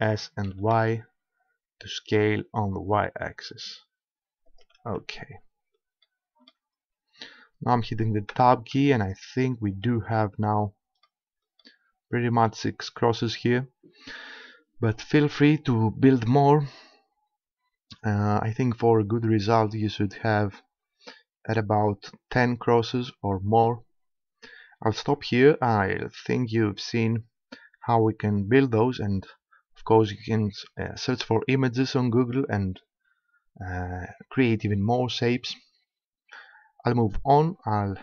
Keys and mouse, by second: 0.1 s, 4.6-6.1 drag, 7.8 middle click, 8.4 Tab.